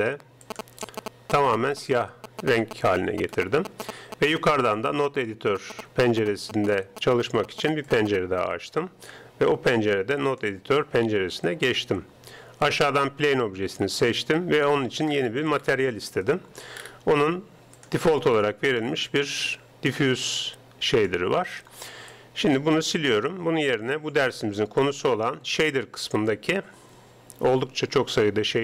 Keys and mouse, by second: 3.4-4.8 middle drag, 4.8-6.6 drag, 5.0 right click, 7.9-9.6 drag, 11.9 n, 12.7-14.4 right drag, 14.6 click, 19.7 click, 22.2-23.8 drag, 23.2 x, 24.0 shift+a.